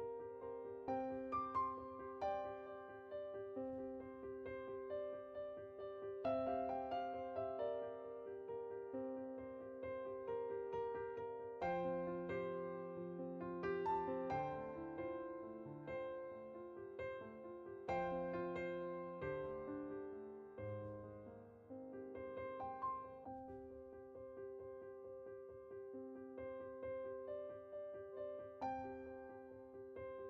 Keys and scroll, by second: 7.2-8.6 typing, 14.6-16.1 typing.